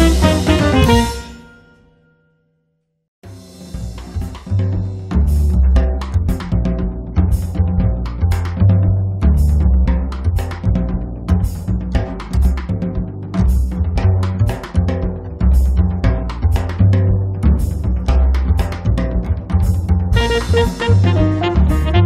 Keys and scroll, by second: 4.0 3, 4.3 0.